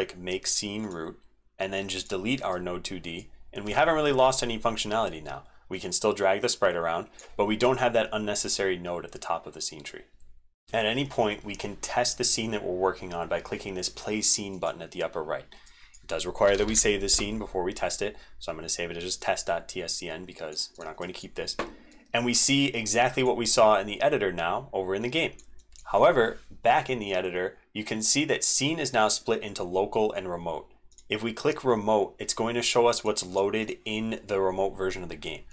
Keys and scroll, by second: 10.3 super+Left, 10.3 super+Up, 21.0 super+Left.